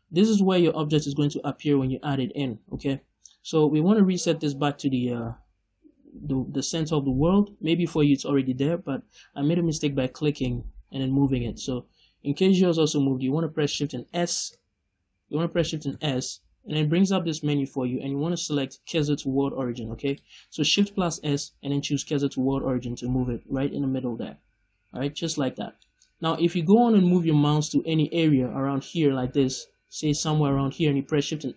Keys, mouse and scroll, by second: 10.2 click, 14.2 shift+s, 24.4-24.8 scroll up 1, 24.8-28.5 middle drag.